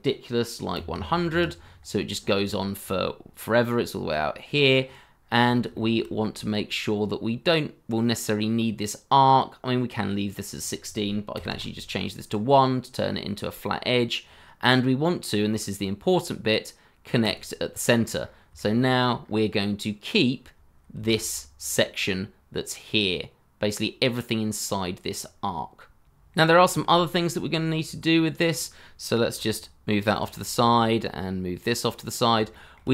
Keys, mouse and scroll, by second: 0.7 1, 0.9 0, 1.3 Return, 2.2-3.7 scroll down 1, 3.7-5.2 scroll up 1, 5.3-5.7 scroll down 1, 5.7 shift+middle click, 6.2 scroll up 1, 11.5 1, 11.5 Return, 15.5 scroll up 1, 18.2-18.5 scroll up 1, 18.5 shift+middle click, 19.2 scroll up 1, 25.4 scroll up 1, 30.3 scroll down 1, 30.6 shift+middle click, 32.5 shift+middle click.